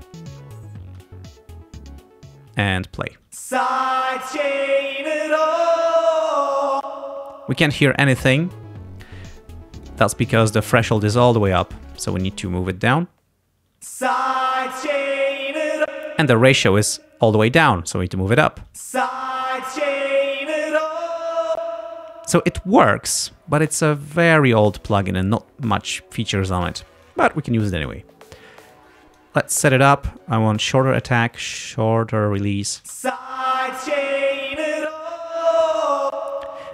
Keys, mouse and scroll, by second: 0.9 space, 3.4 space, 5.5 space, 6.8 space, 9.5 click, 12.1-13.2 drag, 13.8 space, 15.9 space, 17.8 click, 18.8 space, 21.6 space, 27.1-28.1 drag, 28.8 click, 30.3-31.3 drag, 31.6-32.7 drag, 32.9 space, 36.1 space.